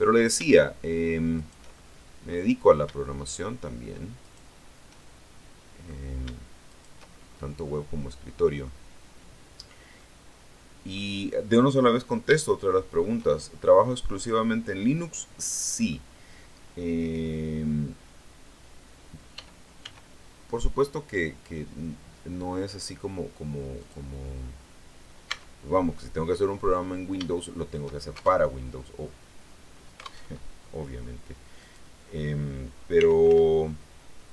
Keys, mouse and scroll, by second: 1.2 shift+right click, 1.6 shift+middle click, 4.1 shift+right click, 4.8-5.9 shift+middle drag, 6.6 shift+right click, 7.6-8.7 middle drag, 9.4-9.8 scroll down 2, 9.8-11.0 middle drag, 11.9-12.4 scroll up 3, 12.4 shift+middle click, 13.1-15.9 shift+middle drag, 19.2 e, 19.7 s, 23.7 click, 25.2 Tab, 25.6 scroll down 1, 26.1-26.4 scroll up 1, 27.2 shift+middle click, 28.2 alt+shift+Tab, 30.1 alt+Tab, 31.4 right click, 32.8 r, 33.2 x.